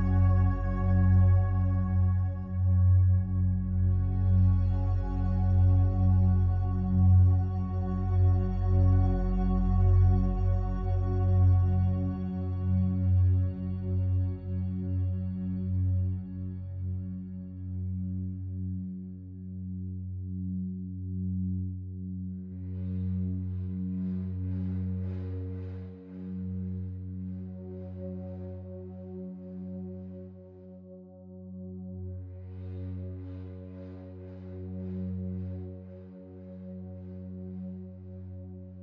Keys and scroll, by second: 8.2 ctrl+z, 25.9-26.8 typing, 31.5 ctrl+r, 37.3 ctrl+z.